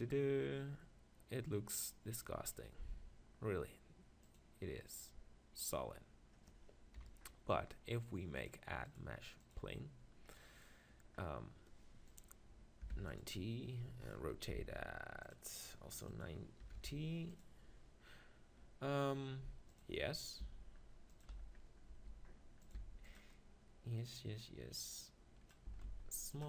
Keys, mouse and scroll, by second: 3.2 middle click, 4.7-6.4 drag, 7.0 KP_7, 9.1-10.3 drag, 12.1-14.0 drag, 14.6 r, 16.1-17.9 drag, 19.7-26.4 drag, 20.4 g, 21.3 z, 21.9 g, 22.7 s, 23.4 middle click, 25.7 s.